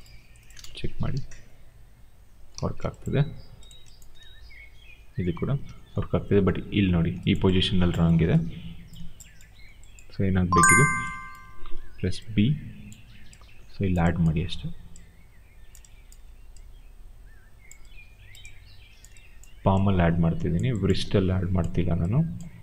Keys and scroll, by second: 0.4 Return, 1.1 e, 2.4 ctrl+z, 5.3 ctrl+z, 12.1 b.